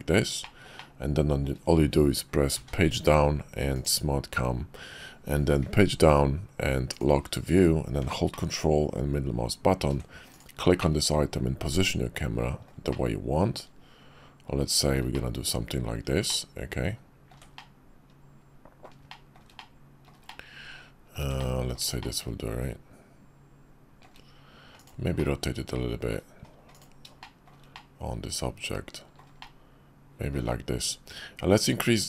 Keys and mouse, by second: 0.4 shift+click, 0.8-1.4 shift+drag, 2.5 Page_Down, 5.9 Page_Down, 8.5-9.8 ctrl+drag, 10.3 click, 10.8 click, 12.6 middle click, 12.9-14.9 shift+middle drag, 15.1 middle click, 16.3-17.4 ctrl+middle drag, 17.6-18.9 middle drag, 19.1 shift+middle click, 19.6 middle click, 20.3-21.2 shift+middle drag, 21.4 ctrl+middle click, 22.0-24.1 shift+middle drag, 24.7 click, 25.2 middle click, 26.7 click, 27.2 shift+middle click, 27.7-29.2 drag, 29.4 shift+click.